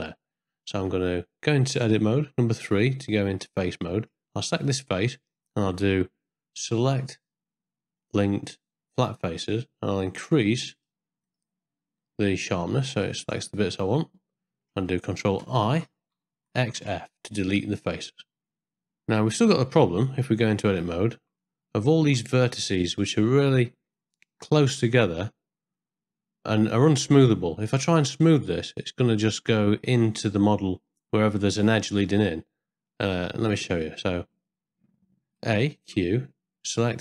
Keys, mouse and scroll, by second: 0.8 Tab, 2.2 3, 3.7 ctrl+scroll up 1, 3.7 ctrl+middle click, 5.2 middle click, 6.9-9.0 drag, 10.1 click, 11.2 click, 12.2-13.4 drag, 13.8 middle click, 15.7 ctrl+i, 16.6 x, 17.5 ctrl+middle click, 18.7 ctrl+middle click, 19.5 middle click, 20.5 Tab, 20.8 1, 21.4 ctrl+middle click, 22.5 middle click, 23.9 ctrl+middle click, 25.7-28.5 middle drag, 28.8 middle click, 35.4 a, 35.8 q.